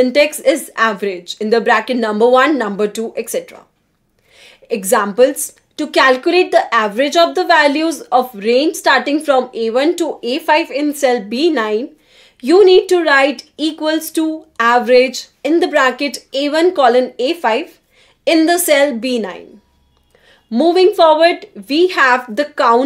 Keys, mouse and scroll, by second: 1.2 shift+9, 1.9 shift+a, 2.4 shift+1, 3.7-5.1 typing, 7.5 shift+a, 7.9 5, 8.4 shift+0, 9.6 Return, 20.4 Escape, 22.0-22.8 drag.